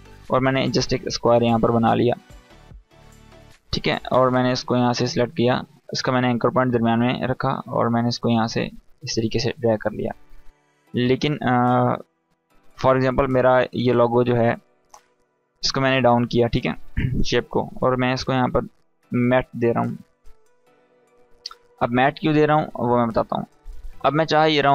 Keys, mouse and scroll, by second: 8.0 click, 13.8-15.7 drag, 17.9 Return, 18.3-23.0 typing.